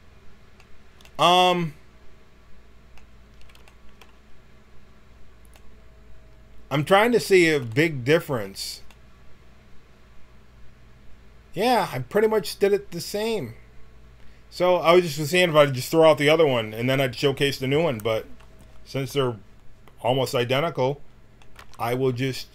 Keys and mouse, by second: 1.0 middle click, 2.9-5.3 middle drag.